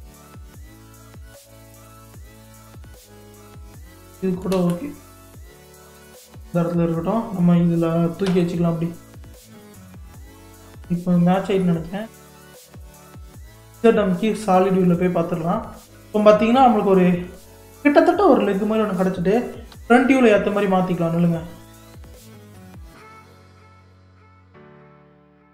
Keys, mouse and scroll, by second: 0.6 KP_3, 4.5 ctrl+z, 5.5 ctrl+z, 6.0 click, 7.1 click, 8.3 g, 11.3-11.6 scroll down 3, 11.6 middle click, 12.2-12.6 scroll down 1, 12.6-13.8 middle drag, 13.8 z, 15.0 click, 15.6-16.2 scroll down 1, 16.2-19.0 middle drag, 19.0-19.7 scroll up 1, 19.7 KP_1, 20.8-22.8 scroll down 2, 22.8 g, 24.0 click, 25.1 Tab.